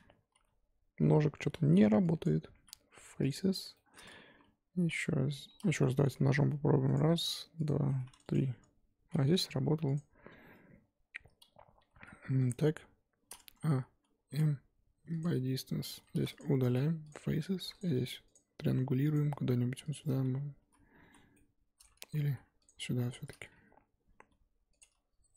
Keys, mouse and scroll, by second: 0.3 j, 1.0-1.6 scroll down 3, 1.7 3, 2.2 click, 3.3-6.0 typing, 3.7 shift+middle click, 4.0 scroll up 1, 10.0 click, 11.8 g, 13.4 a, 15.2 m, 16.1 3, 16.4 click, 17.1 x, 17.6 1, 17.8 click, 18.3 shift+click, 19.1 click, 19.9 shift+click, 20.6 j, 21.1 z, 21.3 middle click, 22.0 ctrl+z, 22.2 ctrl+z, 22.6 click, 23.1 shift+click, 24.2 j, 24.8 click.